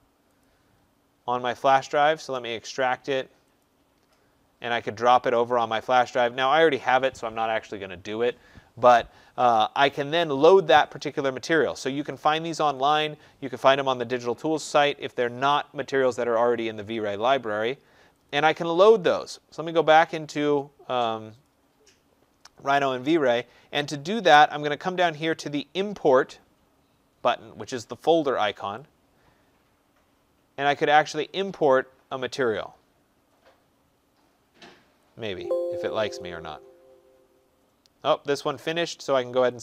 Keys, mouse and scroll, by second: 0.4 click, 2.2 right click, 3.5 click, 5.5 click, 9.4 click, 11.1 click, 12.8 click, 18.2 click, 21.5 click, 28.6 click, 35.4 click, 36.1 click, 39.5 click.